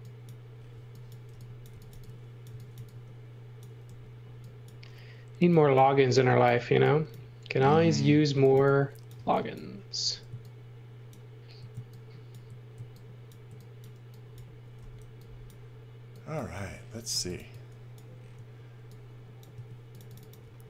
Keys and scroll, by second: 0.7-3.9 typing, 8.1-10.1 typing, 14.8 e, 16.9-18.3 typing, 19.5-20.6 typing.